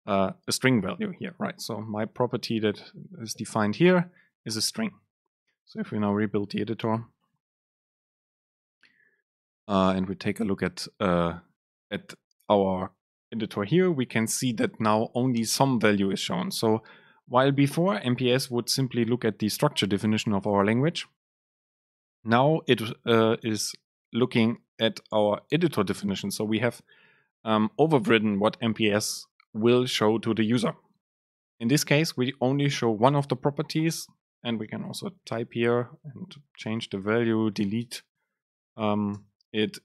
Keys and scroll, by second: 7.2 ctrl+shift+super+F9, 36.4 BackSpace.